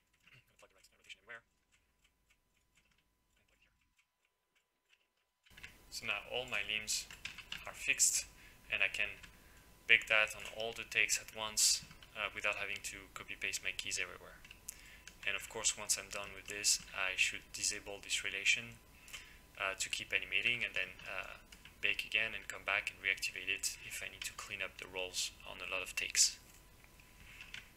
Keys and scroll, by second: 7.3 e.